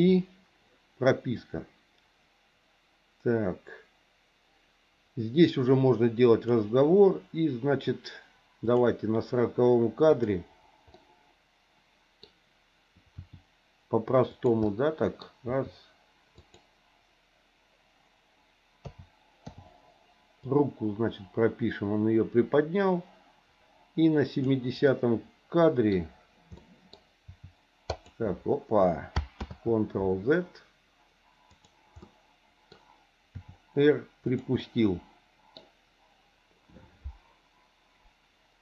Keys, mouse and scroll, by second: 0.0 i, 1.4-6.5 drag, 8.7 click, 10.1 click, 10.9-12.2 middle drag, 13.2 r, 14.7 middle click, 15.2 scroll down 1, 15.5 r, 18.8 a, 19.5 i, 20.5-24.5 drag, 24.8-25.9 middle drag, 26.5 middle click, 27.2 r, 29.5 ctrl+z, 32.0 middle click, 33.3 r, 34.6-35.6 middle drag.